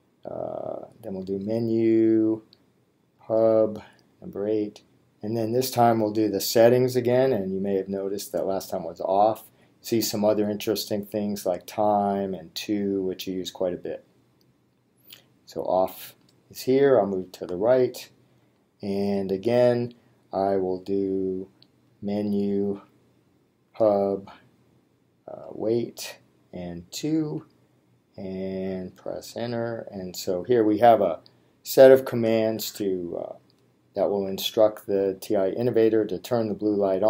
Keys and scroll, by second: 1.3 Menu, 3.2 8, 7.2 3, 8.7 Down, 17.4 Right, 18.4 Return, 21.9 Menu, 23.8 8, 27.1 2.